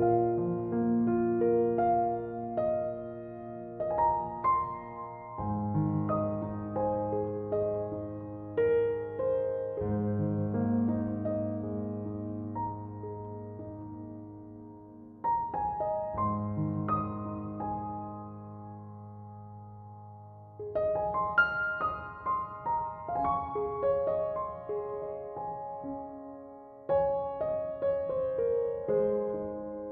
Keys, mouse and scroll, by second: 3.2 click, 4.2-6.3 drag, 6.3-8.6 middle drag, 8.6 click, 9.9-11.3 middle drag, 11.3-11.7 drag, 11.7-14.4 middle drag, 14.4-16.8 drag, 17.1-21.6 middle drag, 21.7 click, 26.8-29.9 drag.